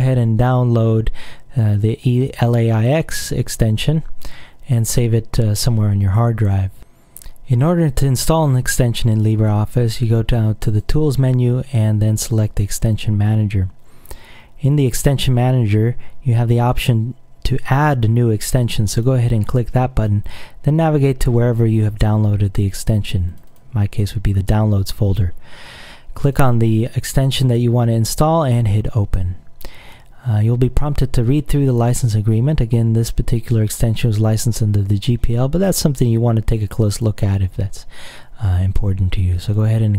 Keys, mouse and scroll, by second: 10.8 click, 12.9 click, 18.9 click, 23.4 click, 26.4 click, 28.5 click, 32.4-33.9 drag, 36.7 click, 39.4 click.